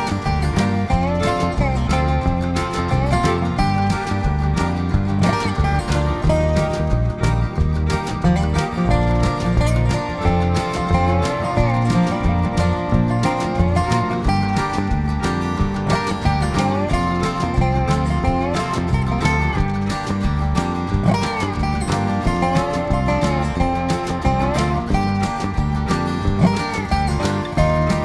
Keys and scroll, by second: 3.1 v, 5.1 g, 5.7 ctrl+[, 5.9 ctrl+[, 10.6-11.3 typing, 12.2 ctrl+[, 12.4 ctrl+[, 17.2 ctrl+v, 17.3 g, 21.3 ctrl+[, 21.4 ctrl+[, 25.4-26.2 typing.